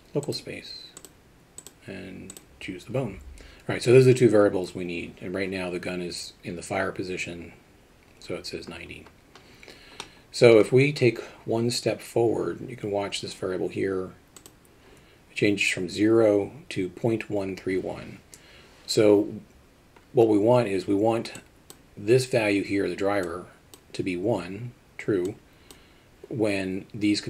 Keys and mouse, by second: 1.7 click, 10.0-10.5 middle drag, 14.4 click, 21.5 click.